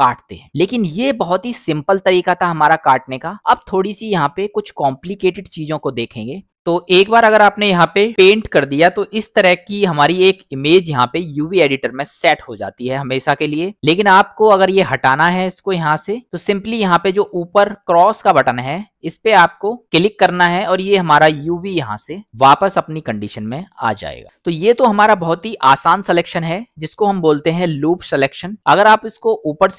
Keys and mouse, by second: 0.9 middle click, 6.5 middle click, 7.7 middle click, 8.8 middle click, 15.0 middle click, 16.1 click, 21.9 middle click, 23.5 middle click, 26.5 middle click, 28.2 middle click.